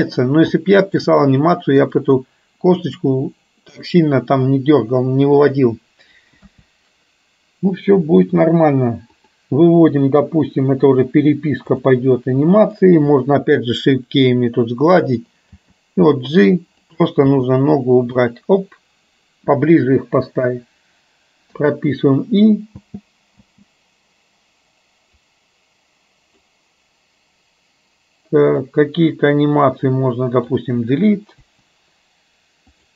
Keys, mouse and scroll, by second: 0.7 shift+middle click, 2.0 click, 6.5 KP_1, 9.2 click, 11.1-12.1 drag, 17.5 g, 22.8 space, 25.3 click, 28.7-30.6 drag, 31.7 Delete, 32.7 click.